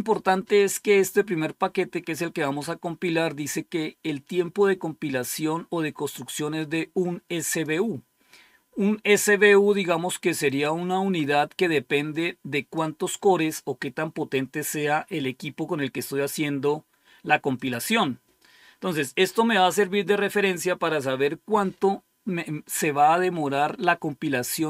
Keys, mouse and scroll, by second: 6.5-7.8 drag, 10.3 click, 12.0 click, 17.4 click.